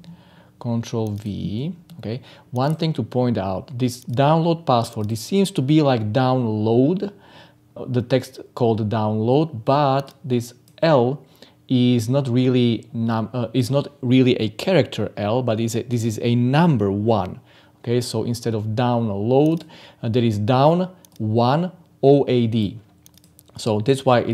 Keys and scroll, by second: 1.5 ctrl+v.